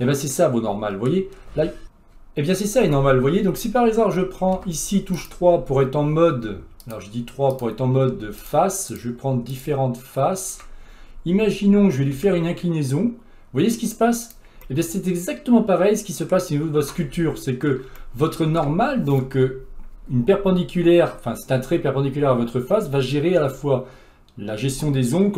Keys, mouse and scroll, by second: 0.3-1.4 middle drag, 1.4-5.3 scroll up 4, 5.3 click, 6.9 click, 8.5 shift+click, 9.0 shift+click, 9.6 shift+click, 12.2 r, 14.7-17.6 middle drag, 17.6-18.0 scroll down 2, 18.0-25.3 shift+middle drag.